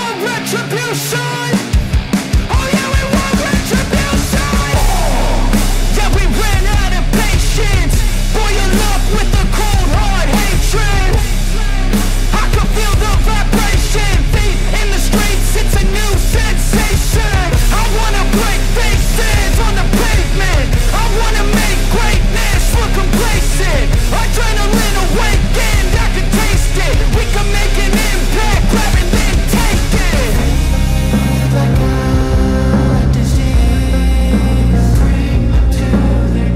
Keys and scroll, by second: 2.9 ctrl+-, 3.1 ], 4.1 ], 7.0 ctrl+alt+z, 11.8 ctrl+alt+z, 12.7 ctrl+alt+z, 13.1 ctrl+alt+z, 13.6 ctrl+-, 13.7 space, 14.5 space, 14.8 space, 17.0 space, 29.9 ctrl+alt+z, 30.8 space, 32.4 space, 36.0 ctrl+alt+z, 36.3 ctrl+=.